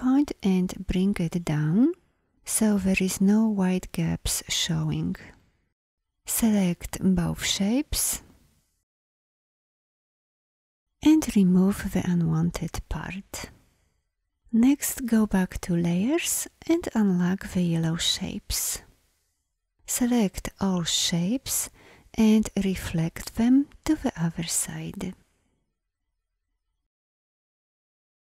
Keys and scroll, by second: 3.3 v, 8.8 shift+m, 19.7 v, 22.2 o.